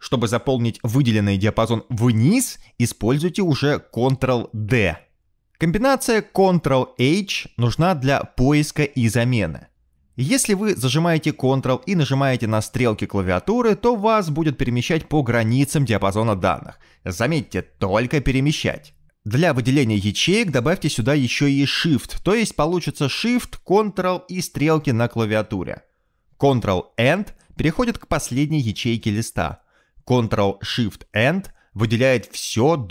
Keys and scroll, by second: 4.2 ctrl+d, 7.0 ctrl+h, 13.1 ctrl+Right, 13.6 ctrl+Left, 14.0 ctrl+Down, 14.2 ctrl+Down, 14.3 ctrl+Right, 14.8 ctrl+Right, 15.2 ctrl+Left, 15.4 ctrl+Left, 16.1 ctrl+Up, 16.3 ctrl+Up, 16.9 ctrl+Right, 17.3 ctrl+Right, 17.9 ctrl+Down, 18.2 ctrl+Left, 21.2 ctrl+shift+Down, 22.0 ctrl+shift+Down, 22.5 ctrl+shift+Up, 23.1 ctrl+shift+Right, 24.0 ctrl+shift+Up, 24.8 ctrl+shift+Right, 25.4 ctrl+shift+Right, 25.7 ctrl+shift+Down, 27.3 Escape, 29.5 ctrl+End, 31.7 ctrl+shift+End.